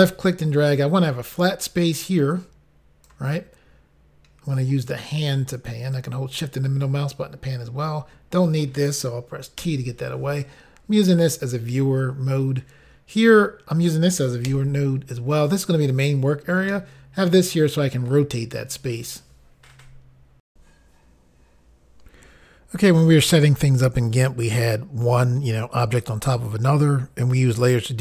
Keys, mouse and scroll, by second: 2.3 click, 5.1 click, 16.7 middle click, 20.5 Insert.